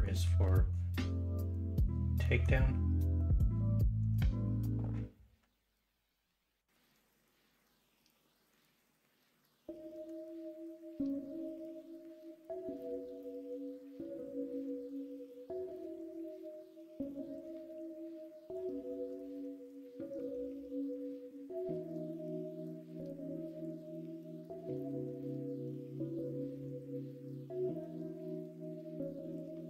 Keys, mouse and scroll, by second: 19.3 middle click, 20.0 scroll up 1, 20.5-21.2 scroll up 1, 21.2 scroll up 1, 23.3-24.4 drag, 29.1 l, 29.4 middle click.